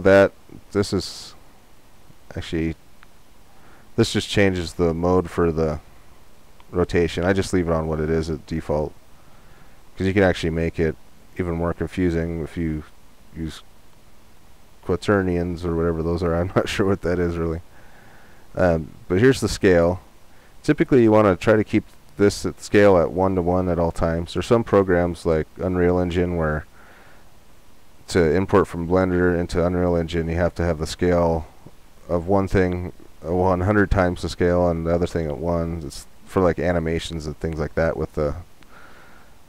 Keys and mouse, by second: 1.3-3.2 drag, 9.7-11.5 drag.